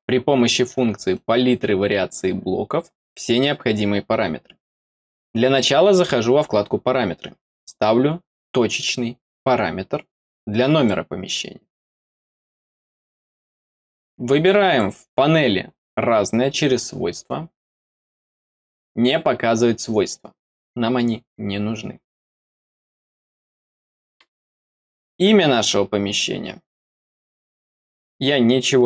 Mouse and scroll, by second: 1.0-3.0 drag, 4.9 click, 8.6 click, 10.7 click, 11.6 middle click, 13.7 click, 14.6 click, 17.9 click, 22.5 middle click, 23.3 middle click, 25.0 click.